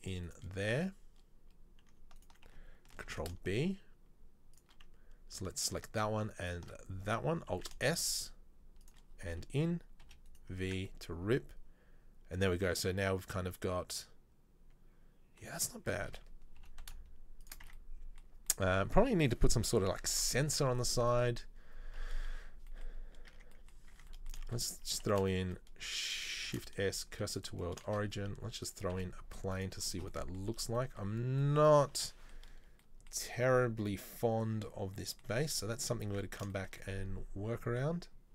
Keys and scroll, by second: 3.2 ctrl+b, 7.7 alt+s, 10.1 v, 10.7 Tab, 15.7 Tab, 16.1 a, 16.7 g, 17.8 Tab, 20.0 KP_3, 20.2 KP_1, 23.4 Tab, 24.0 Tab, 24.6 shift+a, 25.2 shift+s, 26.6 shift+s, 28.0 shift+a, 29.1 s, 35.7 Tab, 36.3 Tab.